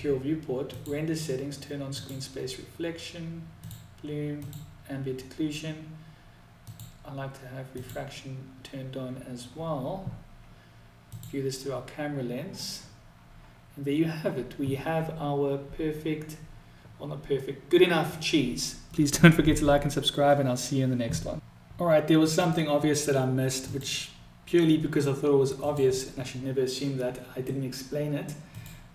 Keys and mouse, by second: 0.0 click, 1.3 click, 3.3 click, 4.3 click, 6.1 click, 7.2 click, 10.4 click, 23.8-25.9 drag, 28.6 click.